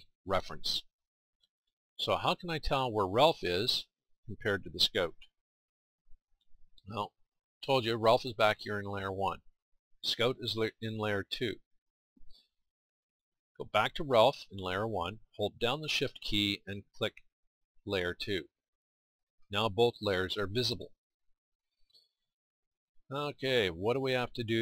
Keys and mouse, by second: 3.1 click, 5.4 KP_1, 11.3 click, 21.2-24.6 middle drag.